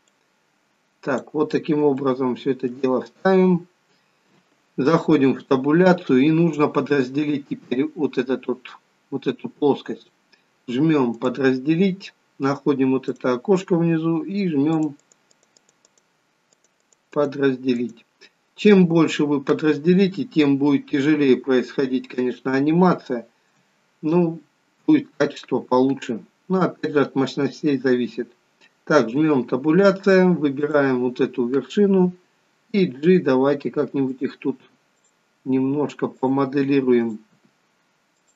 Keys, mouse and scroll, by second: 0.0 click, 1.9 shift+middle click, 2.9-3.8 scroll up 3, 5.1 Tab, 9.9 click, 13.4 click, 14.8 click, 15.2 click, 15.7 click, 16.2 click, 16.7 click, 17.0 click, 17.6 click, 20.4 Tab, 21.5-22.0 scroll up 2, 22.8 shift+middle click, 29.3 Tab, 30.5 click, 32.6 g, 34.9 click, 35.5 g, 36.9 click, 37.3 g.